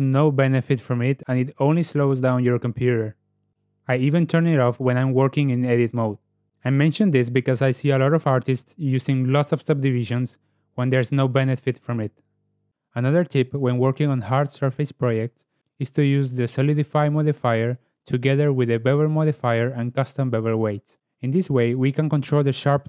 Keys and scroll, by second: 1.8 ctrl+w, 9.6 ctrl+w, 12.6 KP_Decimal, 13.6 Tab, 18.2 n, 19.6 Tab.